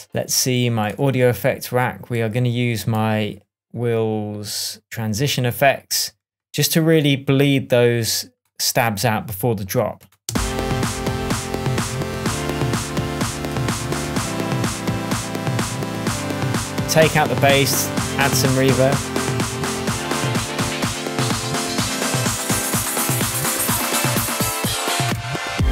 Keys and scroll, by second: 0.9 Right, 10.2 space.